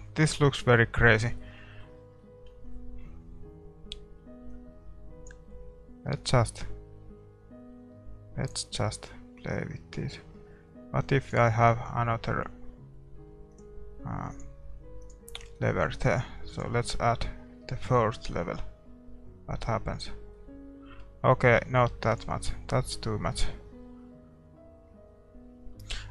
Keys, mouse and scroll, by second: 0.2-4.9 middle drag, 4.9-8.4 drag, 15.1-19.7 drag, 20.3-22.6 middle drag, 22.6-26.0 drag, 26.0-26.1 middle drag.